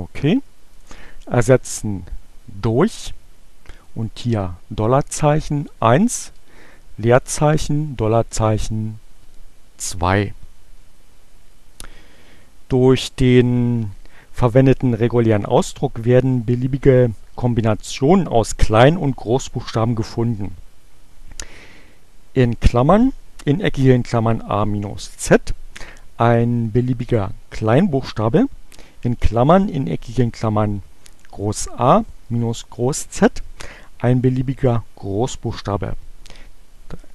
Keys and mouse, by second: 0.6 click, 3.2 shift+4, 5.5 1, 7.8 shift+4, 8.4 2.